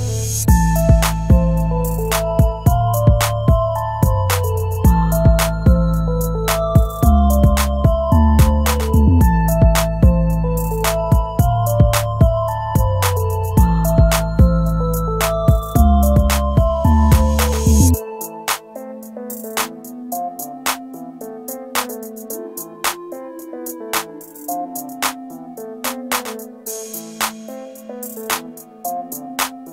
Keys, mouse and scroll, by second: 0.4-1.0 scroll up 1, 1.9 right click, 3.0-6.0 scroll down 1, 9.0 ctrl+g, 10.4 scroll down 1, 17.1 middle click, 19.1 scroll down 1, 23.3-24.1 scroll down 1, 28.8 shift+click.